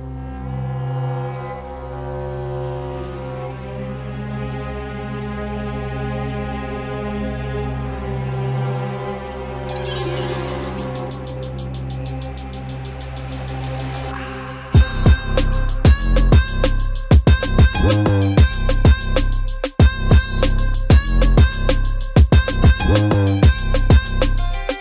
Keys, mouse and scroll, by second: 4.0 g, 6.3 s, 8.5 right click, 10.3 click, 11.2 ctrl+a, 13.6 ctrl+a, 16.8 shift+a, 21.3 click, 24.4 click.